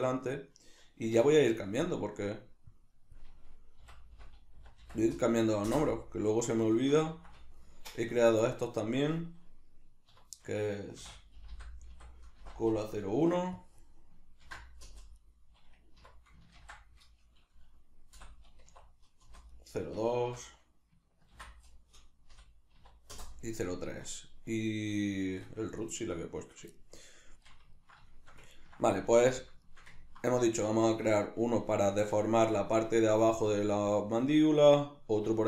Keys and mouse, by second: 1.1 F2, 6.7-8.5 shift+middle drag, 8.5 right click, 10.1 F2, 15.2 right click, 16.0 F2, 19.5 right click, 20.3 F2, 24.2-25.8 shift+middle drag, 25.8 right click, 26.8-35.4 shift+middle drag, 29.0 alt+q.